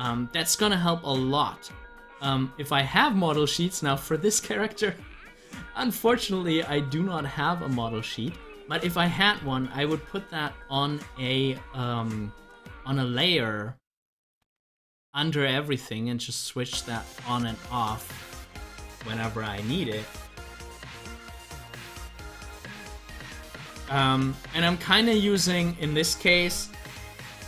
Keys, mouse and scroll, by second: 6.8-9.1 drag, 24.7 scroll up 1, 25.9 scroll up 1.